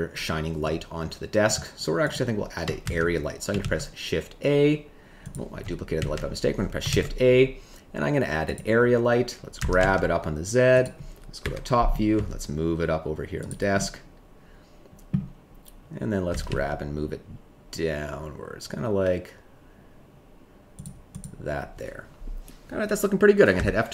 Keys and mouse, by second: 2.1 click, 2.8 shift+d, 3.6 shift+a, 5.3 click, 5.9 ctrl+z, 6.8 shift+a, 9.5 g, 9.8 z, 11.4 KP_7, 12.1 g, 13.7-15.1 middle drag, 16.4 z, 20.7 click.